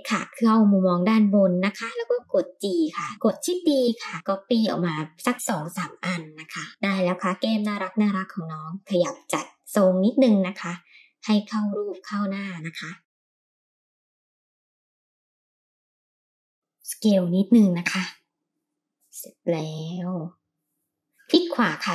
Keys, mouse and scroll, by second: 0.4 r, 2.2 g, 3.1 shift+middle click, 3.1-3.5 scroll up 4, 4.4 shift+d, 5.8 shift+d, 7.6 middle click, 8.5 KP_1, 10.0 click, 10.9 ctrl+l, 11.8 g, 13.4 click, 13.7 ctrl+l, 14.2 click, 14.4 Left, 14.6 l, 14.6 g, 15.1 ctrl+l, 15.3 g, 15.9 Tab, 16.4 s, 18.5 g, 20.6-21.5 drag, 20.6 right click.